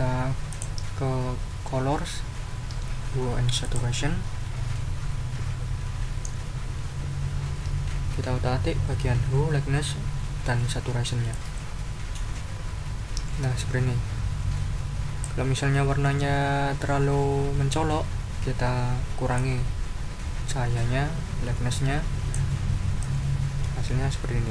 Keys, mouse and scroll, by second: 0.5 click, 3.6 click, 11.3-13.0 drag, 13.3-15.4 drag, 19.3-21.6 drag.